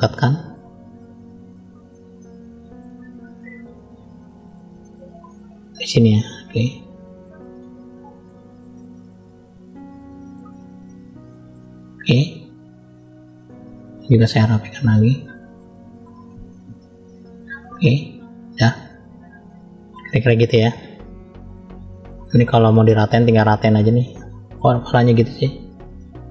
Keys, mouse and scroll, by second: 1.2 click, 2.1 middle click, 3.4 click, 4.2 middle click, 4.7 shift+middle click, 5.6 click, 6.8 click, 7.7 shift+middle click, 8.7-10.3 middle drag, 10.9 click, 12.0 middle click, 12.9 shift+middle click, 13.7-14.1 scroll up 2, 14.3 click, 15.2 middle click, 16.6 click, 18.4-18.8 scroll down 2, 18.8 middle click, 20.0 shift+middle click, 21.2-21.6 scroll up 2, 21.6 middle click, 22.6 shift+middle click, 23.7 click, 25.3 click, 25.9 middle click.